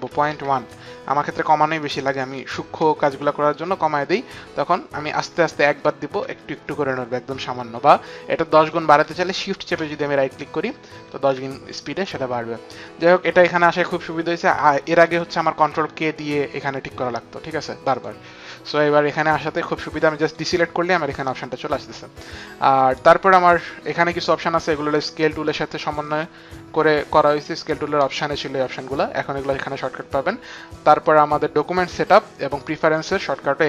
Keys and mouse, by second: 0.0 click, 0.0 KP_Decimal, 0.2 click, 0.2 KP_1, 0.2 KP_Decimal, 0.6 Return, 2.2 Right, 5.0 Right, 5.5 Right, 6.1 Right, 9.7 shift+Right, 10.5 shift+Right, 15.4 ctrl+k, 17.8 click, 20.1 click.